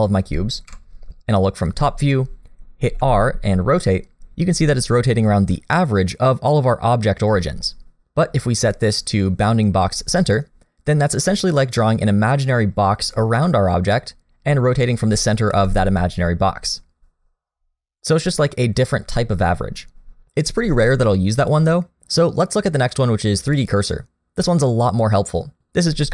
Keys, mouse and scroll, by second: 0.7 KP_7, 2.8 r, 8.6 click, 15.5 r, 21.4 click.